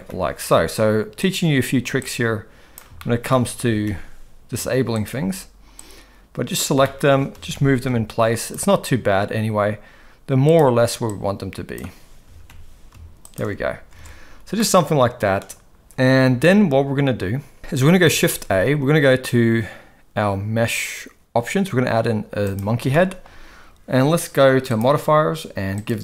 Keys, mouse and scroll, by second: 2.1-2.7 drag, 3.0-3.3 shift+middle drag, 3.6 g, 5.7 click, 6.8-7.1 shift+middle drag, 7.3 g, 11.2-11.8 drag, 12.2 g, 13.9 alt+a, 14.6-15.4 middle drag, 18.2 shift+a, 22.9-23.2 shift+middle drag, 25.8-26.0 drag.